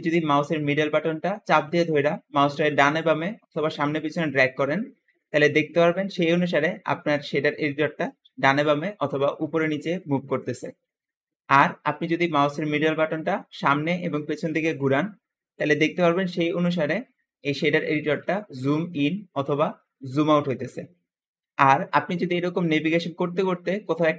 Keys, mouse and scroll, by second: 0.5-2.2 middle drag, 2.7-6.0 middle drag, 6.5 middle click, 7.4-8.8 middle drag, 9.0-11.9 middle drag, 13.1-13.9 scroll up 2, 13.9-15.3 scroll down 2, 14.8-21.5 middle drag, 15.3-16.4 scroll up 2, 16.4-17.9 scroll down 2, 17.9-19.5 scroll up 2, 19.5-21.5 scroll down 2, 21.9 middle click, 22.6 middle click, 22.6 scroll down 2, 23.8 middle click.